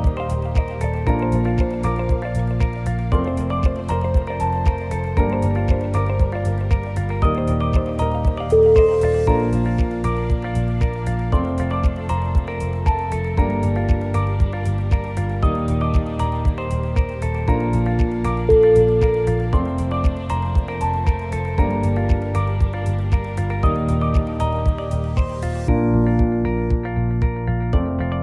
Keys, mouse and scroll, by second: 0.4 middle click, 1.1 2, 1.4 scroll up 1, 1.4 middle click, 1.9 click, 2.3 shift+click, 2.5 shift+click, 3.4 o, 3.6 g, 6.1 middle click, 7.0 KP_7, 7.5 click, 7.7 l, 8.0 middle click, 8.8 KP_7, 9.0 g, 9.1 o, 9.3 g, 11.1 KP_1, 11.4 scroll up 5, 11.7 middle click, 11.9 click, 12.4 shift+click, 12.8 click, 13.7 click, 14.0 shift+click, 14.5 f, 15.4 click, 16.1 click, 16.5 g, 17.3 click, 18.0 shift+click, 18.6 f, 18.9 click, 19.2 g, 20.6 click, 21.1 shift+click, 21.7 f, 22.1 click, 22.3 g, 23.3 scroll down 1, 23.5 scroll down 1, 24.1 click, 24.6 shift+click, 25.0 f, 25.3 click, 25.7 g, 26.3 scroll down 1, 26.8 click, 26.8 scroll up 2, 27.2 shift+click.